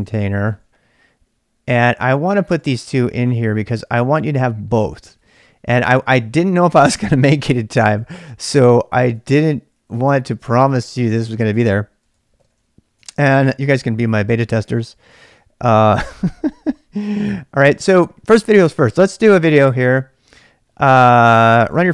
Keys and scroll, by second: 0.0-18.9 typing, 3.7 ctrl+[, 14.7 ctrl+[.